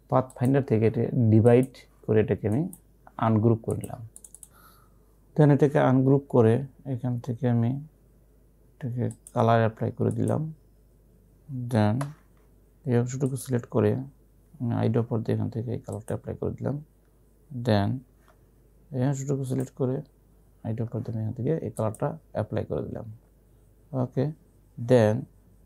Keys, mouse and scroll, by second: 2.6 right click, 3.8 click, 5.2-6.5 typing, 8.9-9.7 typing, 9.2 click, 12.0 v, 13.3 click, 14.7-15.4 typing, 16.0 click, 18.2 v, 19.6 click, 20.9 i, 21.8 click, 24.1 v.